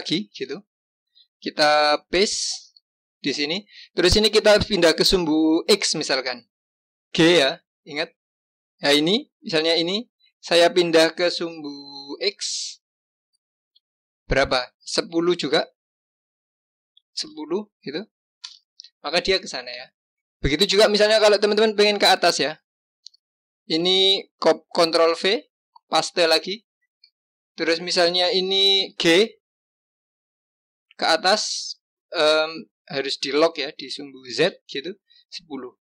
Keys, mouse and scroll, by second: 0.2 ctrl+c, 2.5 ctrl+v, 7.6 g, 19.9 click, 24.8 ctrl+v, 28.8 g.